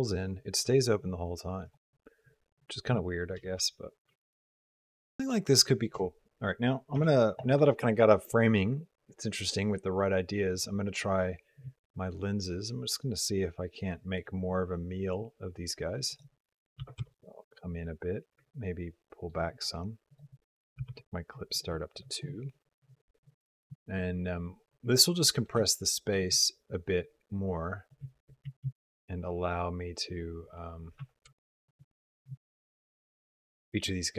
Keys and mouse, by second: 3.2 g, 6.9 shift+b, 11.4-14.0 shift+drag, 15.9-17.0 drag, 18.5 ctrl+middle click, 20.0 click, 23.9 ctrl+click, 24.5 ctrl+middle click, 24.7 ctrl+click, 25.5 shift+click, 26.2-27.8 shift+drag, 28.3 r, 31.2 shift+click, 32.2 shift+click.